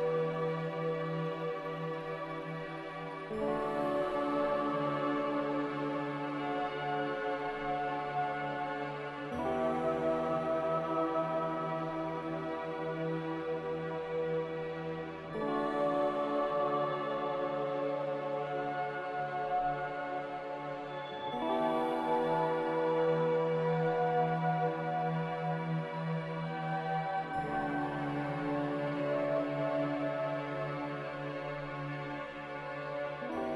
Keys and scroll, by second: 8.9 typing, 9.5 Return, 13.5 1, 13.5 0, 16.5 z, 24.9 c, 31.3 z.